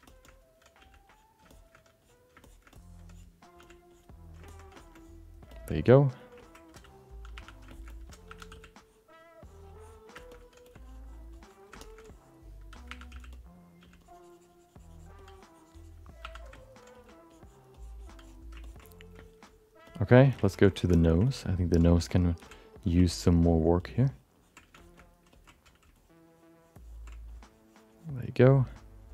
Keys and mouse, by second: 0.0 shift+middle click, 0.2 alt+middle click, 0.8 f, 1.1 click, 1.5 alt+shift+middle click, 2.0 click, 2.4 shift+middle click, 2.7 middle click, 3.1 click, 3.6 f, 3.9 click, 4.4 ctrl+alt+middle click, 4.7 shift+middle click, 4.9 alt+middle click, 5.5 alt+shift+middle click, 5.7 alt+middle click, 6.4 ctrl+alt+middle click, 7.3 1, 7.7 alt+shift+middle click, 7.9 alt+middle click, 8.3 2, 8.8 click, 9.8 click, 10.1 alt+shift+middle click, 10.6 f, 10.8 click, 11.3 click, 11.8 alt+shift+middle click, 12.0 click, 12.9 1, 13.1 f, 13.8 f, 14.0-15.1 drag, 15.2 click, 16.2 2, 16.5 alt+middle click, 16.9 click, 17.3 click, 17.7 click, 18.6 ctrl+alt+middle click, 18.8 alt+middle click, 19.2 shift+middle click, 19.4 alt+middle click, 19.9 shift+middle click, 20.1 alt+middle click, 20.4 middle click, 20.7 middle click, 20.9 alt+middle click, 21.2 ctrl+middle click, 22.4 f, 23.1 ctrl+click, 23.4 ctrl+click, 23.8 ctrl+click, 24.4 ctrl+click, 24.8 alt+shift+middle click, 25.0 alt+middle click, 25.3 ctrl+middle click, 25.9 ctrl+click, 26.3 ctrl+click, 26.5 ctrl+click, 27.3 click, 27.9 click, 28.3 click.